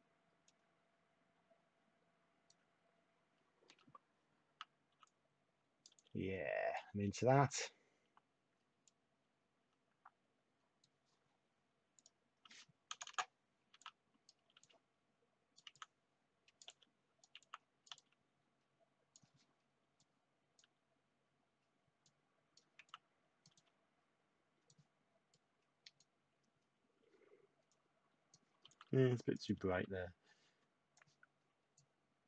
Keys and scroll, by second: 4.9 t, 5.9 y, 12.9 Return, 13.0 Return, 13.7 t, 21.1 typing, 22.5-24.9 typing, 25.9-26.7 typing, 28.6 typing.